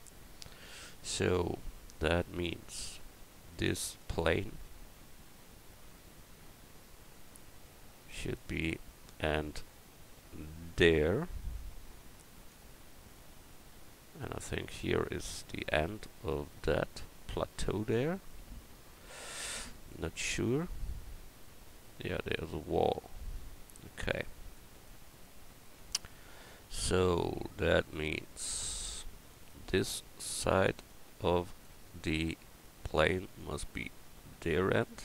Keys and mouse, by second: 3.5-4.2 right drag, 4.6 Tab, 5.1 Tab, 6.3 Tab, 13.4-15.8 middle drag, 15.9-17.1 middle drag, 17.2-18.5 middle drag, 19.2 KP_1, 28.6 Tab, 30.2 Tab, 31.1 Tab, 31.7 Tab.